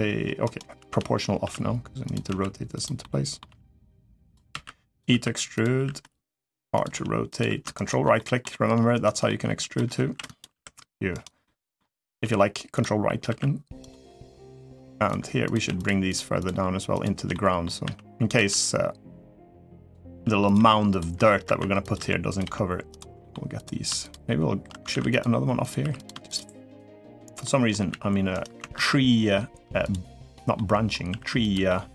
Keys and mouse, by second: 0.6 o, 1.2 r, 2.0 s, 2.8 middle click, 3.2 g, 4.7 e, 4.8 s, 5.5 r, 6.7 g, 7.6 ctrl+right click, 7.9 middle click, 8.7 ctrl+right click, 9.0 middle click, 9.7 s, 10.3 r, 11.2 middle click, 12.0 g, 13.0 r, 13.8 middle click, 14.3 middle click, 15.2 click, 15.5 click, 16.1 shift+click, 16.7 shift+click, 17.1 middle click, 17.6 e, 18.1 s, 19.9-22.2 typing, 23.0 middle click, 24.8 ctrl+r, 25.6 3, 26.5 shift+click, 27.2 middle click, 27.7 e, 28.5 ctrl+z, 30.3 middle click, 30.9 r, 31.4 middle click.